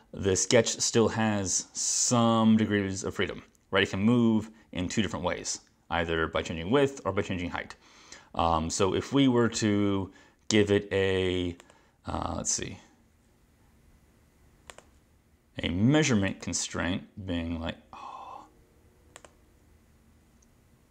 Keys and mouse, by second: 11.6 click, 14.7 click, 16.3 click, 19.2 click.